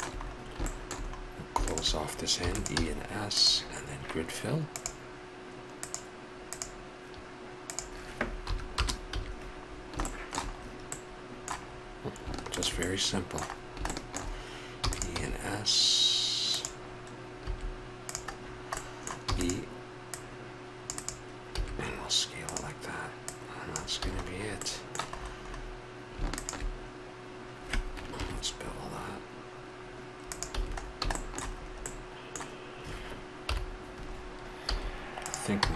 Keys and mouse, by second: 2.4 e, 2.7 s, 7.7-9.7 drag, 9.1 a, 9.7 middle click, 10.1 middle click, 12.5 right click, 14.8 e, 15.2 s, 17.5 s, 19.2 e, 21.6 s, 24.0 a, 28.2 ctrl+b, 30.5 a, 33.4 KP_7, 34.7 z, 35.6 b.